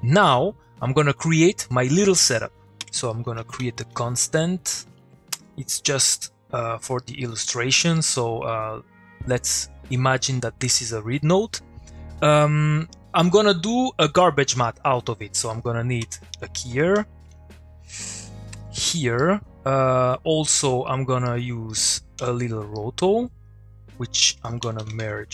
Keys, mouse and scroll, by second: 0.6 click, 2.4 click, 2.8 Tab, 3.2 c, 4.7 Down, 5.3 Return, 6.0 middle click, 6.6 click, 7.0 middle click, 11.8 middle click, 12.9 click, 16.0-17.4 typing, 18.0 Down, 18.5 Return, 19.2 middle click, 19.8 click, 21.2 middle click, 21.7 click, 22.2 o, 22.7 middle click, 23.2 click, 24.3 Tab, 24.6 typing.